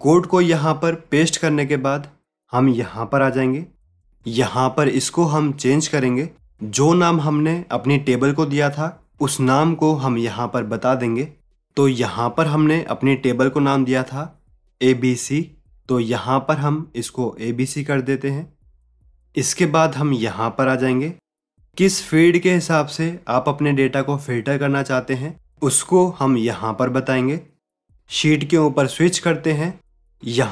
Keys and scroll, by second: 28.2 alt+Tab.